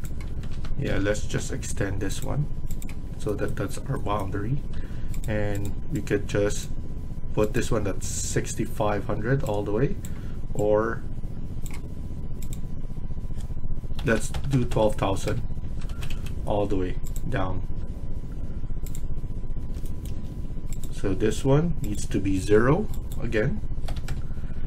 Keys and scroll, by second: 0.1 Escape, 0.4 Escape, 0.8-1.2 typing, 2.9 Escape, 4.7 Escape, 13.6-14.7 typing, 15.2 Return, 15.5 Escape, 15.8 Escape, 16.0 Escape, 19.5 Escape, 22.0 Escape, 23.8 typing, 24.0 Return.